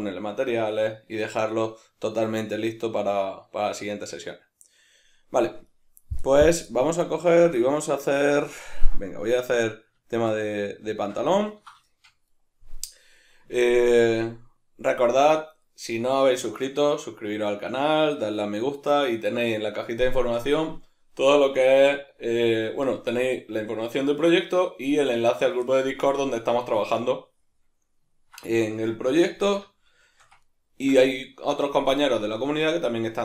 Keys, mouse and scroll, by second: 4.9-33.2 middle drag, 29.3 alt+q.